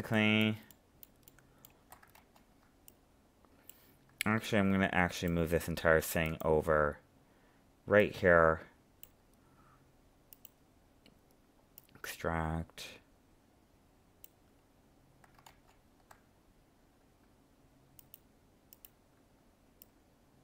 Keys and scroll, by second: 2.1 ctrl+z, 15.5 ctrl+z.